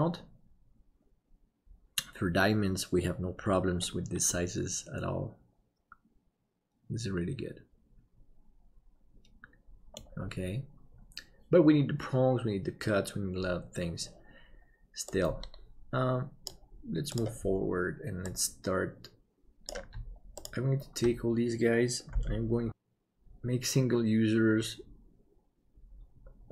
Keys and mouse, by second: 4.2-9.9 middle drag, 22.9-26.5 drag.